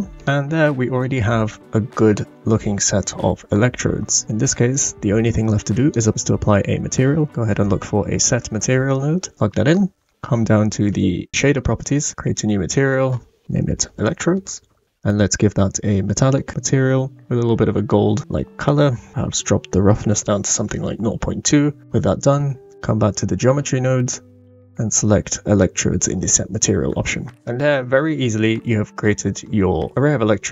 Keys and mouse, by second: 0.1 click, 0.1 right click, 4.7-5.9 drag, 6.1 shift+a, 12.8-14.8 drag, 16.4 click, 19.1-20.6 drag, 24.2-25.7 drag, 27.5-28.1 middle drag, 28.6-29.1 shift+middle drag, 29.9-30.5 middle drag.